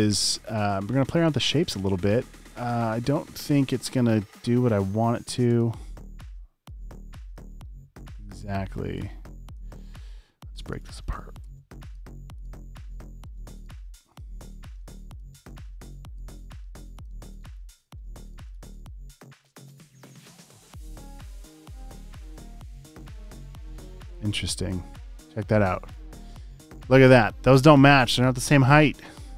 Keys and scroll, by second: 0.2 space, 1.6 space, 1.9 space, 7.5 super+z, 15.3 space, 15.8 super+space, 16.4 space, 16.8 space, 18.4 space, 19.3 space, 19.4 space, 19.7 space, 24.5 space, 28.5 alt+super+space.